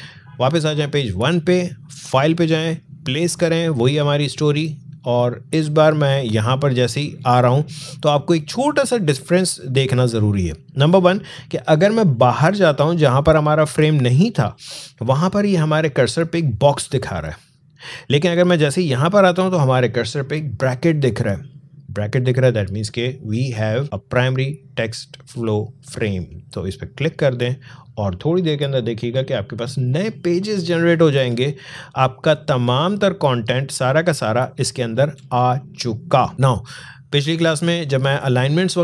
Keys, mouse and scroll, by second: 0.0 click, 26.8 click, 29.9 click, 31.3 alt+scroll down 1, 32.8 alt+scroll up 1, 33.6-34.1 alt+scroll down 1, 35.3 space, 35.4 click, 35.9 space, 37.5 alt+scroll up 1.